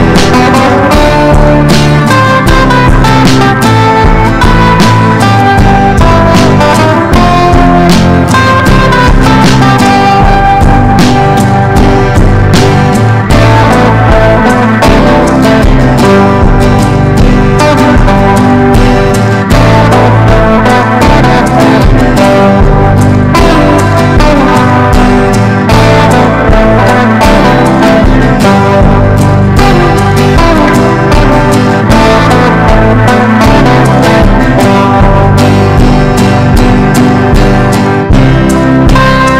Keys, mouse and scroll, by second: 5.2 ctrl+g, 6.4 click, 7.9 Down, 8.2 typing, 10.9 Down, 11.4 click, 18.1-30.2 typing, 30.9 click, 31.9 ctrl+e, 33.4 ctrl+b, 34.6 click.